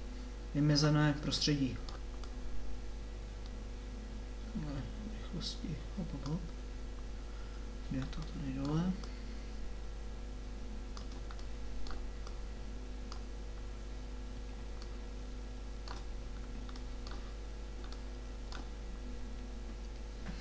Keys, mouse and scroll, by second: 2.2-4.0 drag, 9.1-11.0 drag, 14.0 middle click, 14.7 middle click, 16.1 middle click, 16.3 middle click, 17.1-18.1 middle drag, 18.2 click.